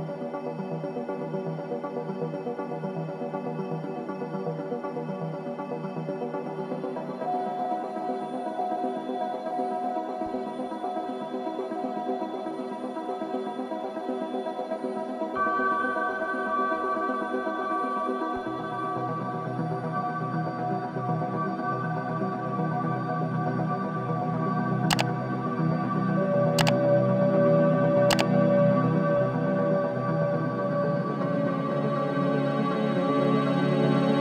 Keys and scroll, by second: 10.6 ctrl+j.